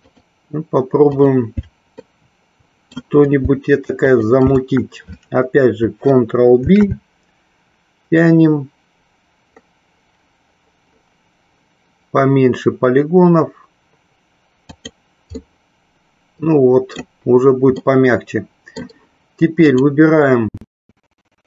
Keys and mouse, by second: 0.3 alt+shift+click, 1.3 alt+shift+click, 2.3 shift+middle click, 4.1 alt+shift+click, 14.9 click, 15.6-17.3 middle drag, 18.0 middle click.